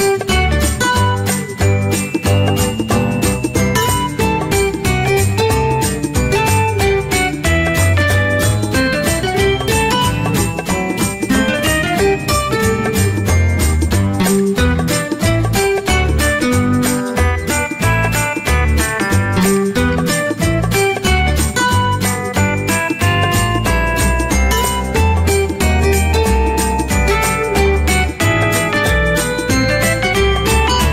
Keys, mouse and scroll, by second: 9.1 click, 24.5 alt+Num_Lock, 24.7 alt+click, 26.0 click, 27.7-30.9 typing.